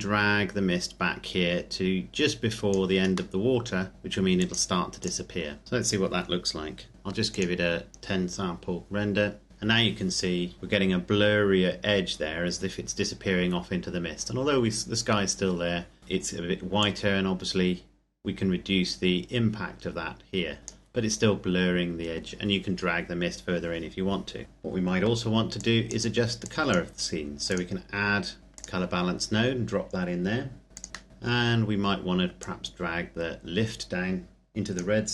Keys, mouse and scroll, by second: 3.3 middle click, 4.3 click, 7.3 click, 7.9 F12, 8.9-9.5 scroll up 1, 10.2-11.7 scroll up 1, 12.9-14.7 scroll down 1, 17.0 click, 24.4-25.6 scroll down 1, 25.6 click, 28.5 click, 30.7 click, 31.1 middle click, 31.3-32.4 scroll up 1, 32.4 click.